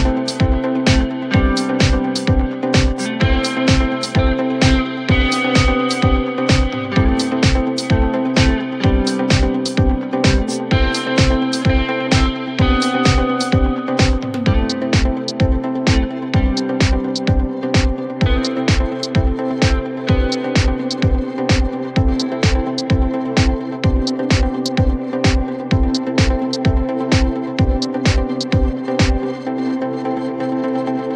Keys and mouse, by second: 0.7 click, 0.8 click, 1.3 shift+click, 1.9-3.4 alt+drag, 4.4 alt+click, 5.7 4, 6.0 click, 7.0-8.1 drag, 9.1 click, 9.8 alt+drag, 10.3-10.8 alt+drag, 10.9 alt+x, 11.3 drag, 11.7 click, 11.9-14.1 drag, 14.5 alt+x, 15.5-16.7 alt+drag, 17.8 alt+click, 18.4 alt+middle click, 18.7 alt+click, 20.0 click, 20.4 click, 21.1 3, 22.4 click, 23.5 click, 24.3 shift+click, 27.5 alt+click, 28.1 alt+middle click, 30.2 ctrl+click, 30.8 ctrl+click.